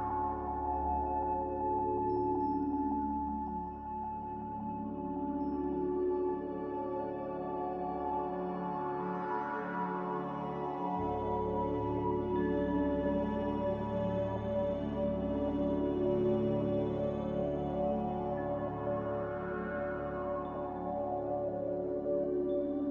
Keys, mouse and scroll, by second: 0.1 Delete, 2.3 Delete, 5.5 Escape, 7.7 a, 19.7 q.